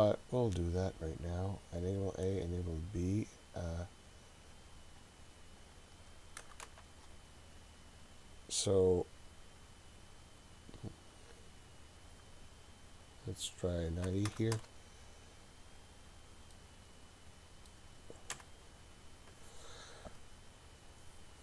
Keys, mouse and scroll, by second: 0.1 click, 5.0-7.4 drag, 8.8-15.8 drag, 15.9-16.5 scroll down 3, 16.5-17.7 middle drag, 18.3 KP_7.